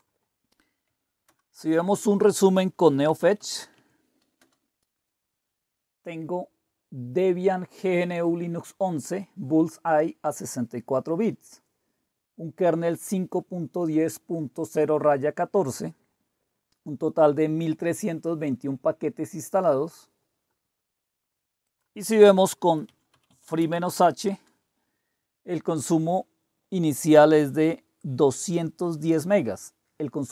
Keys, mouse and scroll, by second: 1.3 super+Return, 2.8-4.0 typing, 4.4 Return, 21.6 click, 22.9-24.5 typing, 28.0-29.2 drag.